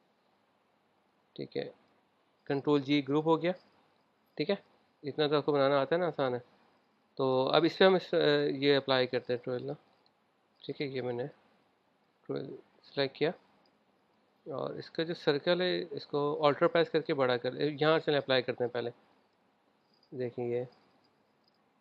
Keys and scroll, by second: 0.4 v, 3.2 super+g.